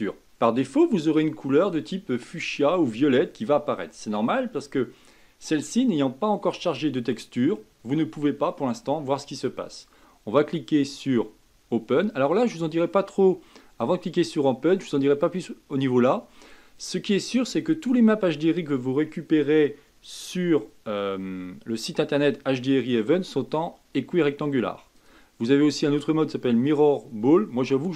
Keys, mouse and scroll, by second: 0.1 click, 25.0-27.9 drag.